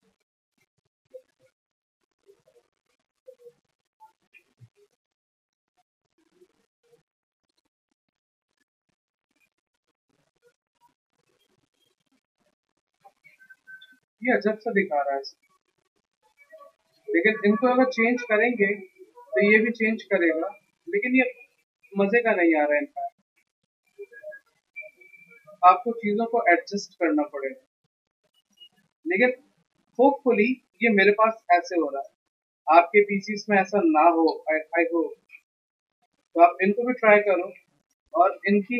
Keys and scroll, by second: 3.2 v, 3.7 s, 4.3 x, 4.6 v, 12.3 ctrl+alt+c, 16.1 a.